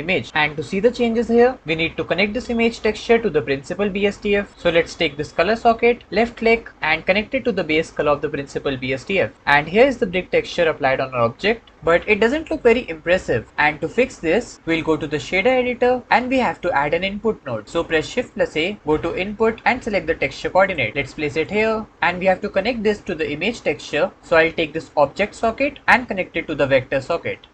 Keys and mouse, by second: 6.7-7.8 drag, 11.7-13.5 middle drag, 15.2 shift+click, 18.1 shift+a, 25.8-27.0 drag.